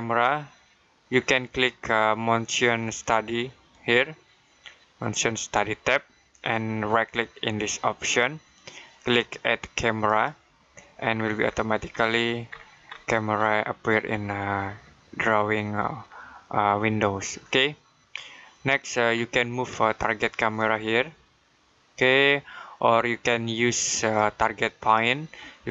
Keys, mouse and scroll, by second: 3.5 click, 7.9 right click, 9.9 click, 11.0 scroll down 1, 11.2-13.2 scroll up 1, 13.2-15.3 scroll down 1, 16.0 middle click, 19.0-20.4 scroll down 1, 20.4 click.